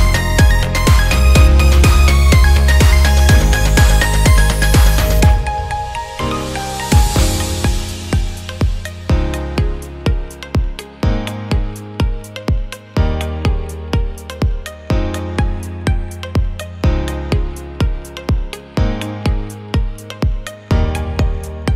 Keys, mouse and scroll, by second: 2.4 BackSpace, 4.5 KP_0, 5.2-6.6 drag, 17.6 KP_0, 18.8 space.